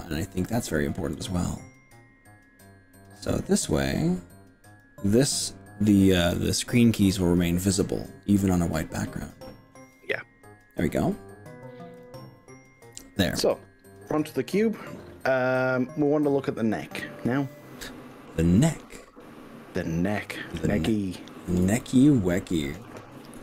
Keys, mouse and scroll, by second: 1.2 click, 2.8-5.0 drag, 12.0 click, 14.4 Tab, 20.2 1, 21.0-21.6 scroll up 4, 21.8 shift+middle click, 23.3 KP_1.